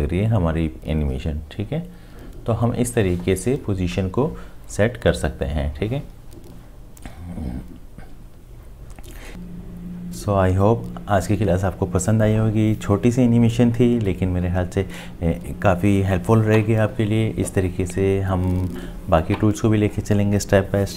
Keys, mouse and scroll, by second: 9.3 space, 13.4-15.4 scroll up 1.